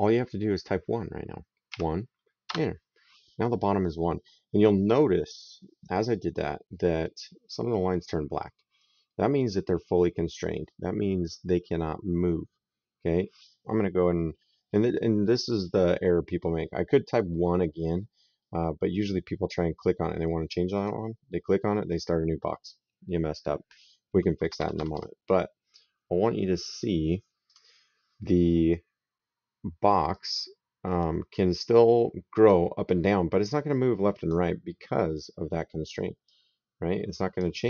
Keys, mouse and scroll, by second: 1.5 KP_1, 2.2 Return, 20.6 click, 24.2 Escape, 27.3 click, 29.9 click, 36.1 click.